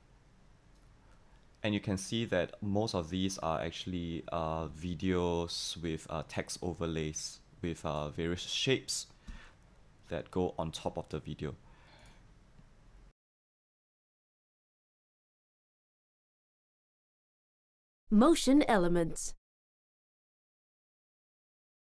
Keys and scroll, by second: 9.3 v.